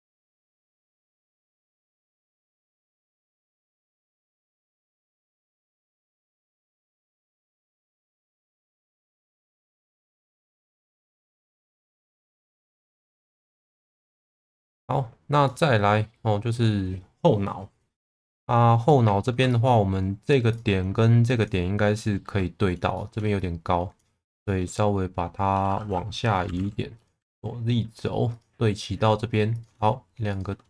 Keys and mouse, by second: 0.3-1.9 middle drag, 2.6 click, 2.8 alt+middle click, 5.8 Tab, 6.1 middle click, 7.3 Tab, 7.6-8.8 middle drag, 9.3 click, 11.2 shift+middle click, 12.2 click, 13.5 Tab, 14.0 ctrl+s, 14.3 middle click, 15.5 middle click, 18.1 Tab, 18.9 alt+middle click, 19.5 shift+middle click, 22.0 shift+middle click, 23.0 shift+middle click, 23.6 click, 24.4 shift+middle click, 26.5 g, 26.6 b, 27.2 z, 28.3 click, 29.6 click.